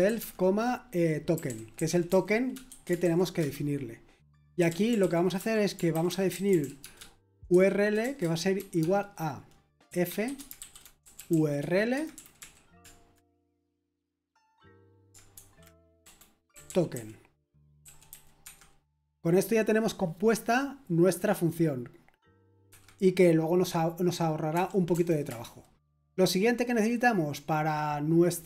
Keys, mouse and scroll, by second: 0.0-3.4 typing, 4.6-11.3 typing, 11.9 Escape, 12.1 Right, 12.4-13.3 typing, 15.3-18.1 typing, 18.4 Escape, 19.3-20.2 typing, 25.2 Return.